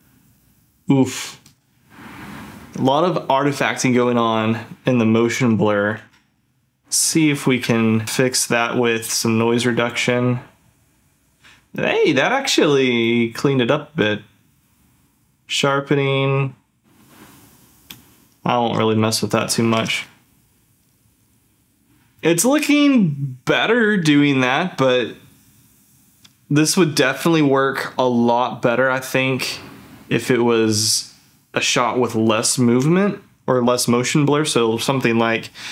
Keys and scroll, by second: 5.9 ctrl+f, 19.2 ctrl+f.